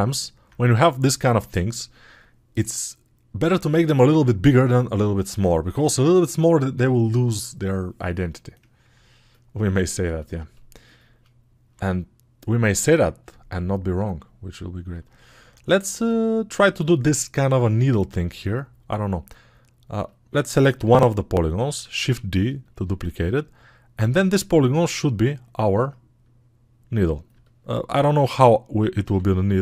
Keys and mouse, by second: 27.2-29.6 alt+drag.